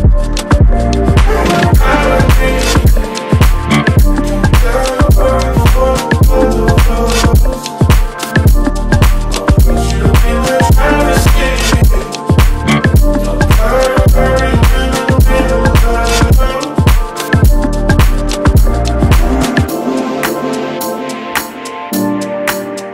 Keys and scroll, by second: 0.7 space, 3.8 space, 4.2 alt+Tab, 6.0 Tab, 6.7 Tab, 8.1 Tab, 10.0 alt+Right, 12.1 alt+Right, 13.5 Left, 16.4 Up, 19.0 ctrl+g, 20.6 Down.